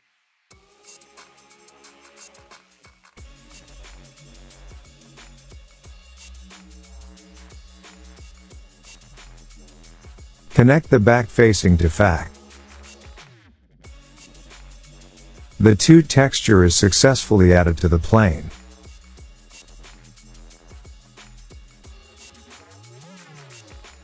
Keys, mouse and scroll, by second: 9.4 scroll, 10.3 scroll, 11.2 scroll, 12.0 middle click, 12.2 click, 14.4 click, 14.4 middle click, 14.8 middle click, 21.0 click, 23.4-24.0 scroll up 8.